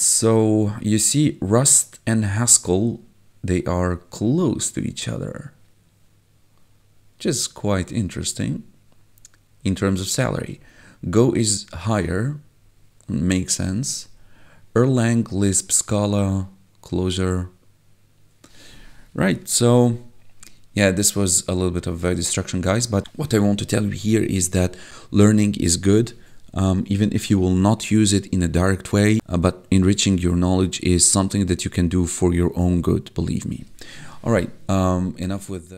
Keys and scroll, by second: 19.7 1.